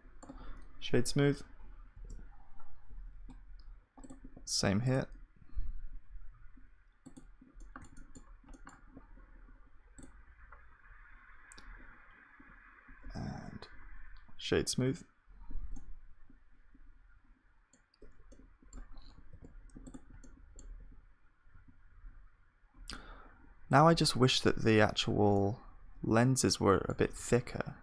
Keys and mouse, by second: 1.1 F3, 3.5-13.7 middle drag, 13.7 F3, 15.8-19.3 middle drag, 19.3 ctrl+s, 19.6 middle click, 20.8 KP_2, 21.5 KP_1, 24.1 Tab, 24.1-25.3 middle drag, 24.8 a, 25.7-27.8 middle drag, 27.3 s.